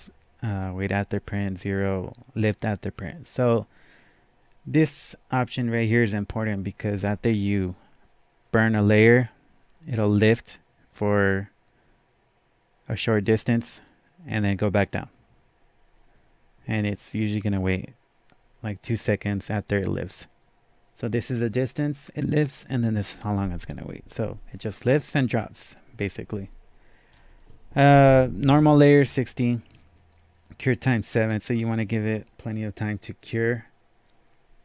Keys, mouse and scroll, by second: 0.6 click, 0.6-1.5 scroll down 1, 27.1 scroll down 2.